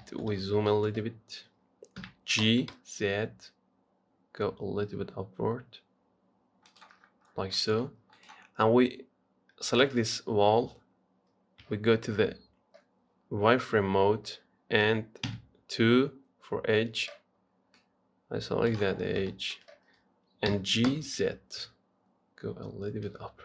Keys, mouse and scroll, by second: 0.3 shift+middle click, 0.6-0.9 scroll up 4, 0.9 shift+middle click, 1.3-2.2 scroll up 1, 2.2 g, 7.2-7.6 scroll down 10, 7.8 shift+middle click, 8.4 click, 8.7-9.2 scroll down 3, 10.1 Tab, 11.9 z, 15.5 2, 18.0 click, 19.2-19.5 scroll up 4, 19.5-20.7 shift+middle drag, 20.7 g.